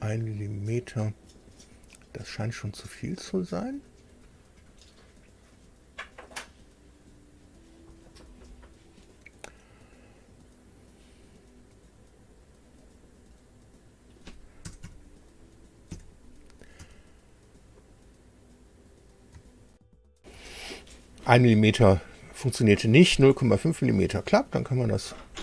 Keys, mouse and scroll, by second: 0.3-1.6 middle drag, 2.3 scroll down 2, 4.6-4.9 scroll down 2, 7.2 scroll up 2, 7.8 scroll down 2, 12.4 click, 13.7 click, 14.6 KP_0, 14.8 KP_Decimal, 15.9 KP_5, 16.8 Tab, 19.7 super+r, 24.3 click.